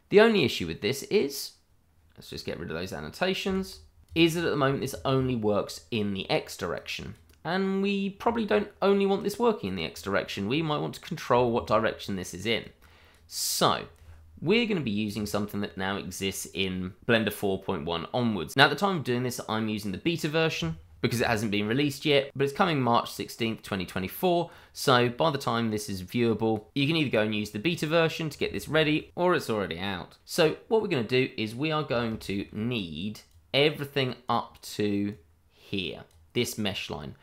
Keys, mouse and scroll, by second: 2.1 click, 2.7 n, 3.1 scroll down 1, 3.4-3.8 scroll up 1, 3.8 click, 4.1-4.8 scroll down 2, 4.5 click, 4.8 click, 5.3 double click, 5.8 n, 5.9 click, 6.4 scroll up 1, 6.5 shift+middle click, 6.7-7.1 scroll down 1, 7.1 click, 8.4-8.8 scroll down 1, 8.8 middle click, 9.7 click, 10.5-11.3 scroll up 1, 11.4 shift+middle click, 12.6 click, 13.5-15.6 scroll up 1, 21.7-22.4 scroll down 1, 22.4 click, 28.1-28.5 scroll down 1, 28.6 shift+middle click, 30.3-31.8 scroll up 1, 31.8 scroll down 1, 32.1 shift+middle click, 33.3 click.